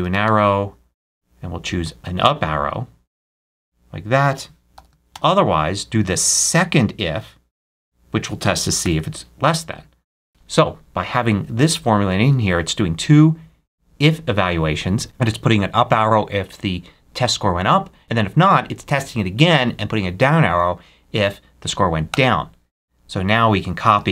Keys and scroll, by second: 0.0-0.6 typing, 4.6 shift+', 5.0 shift+,, 5.7 ', 8.7 shift+0, 22.0 Return, 23.8 super+c.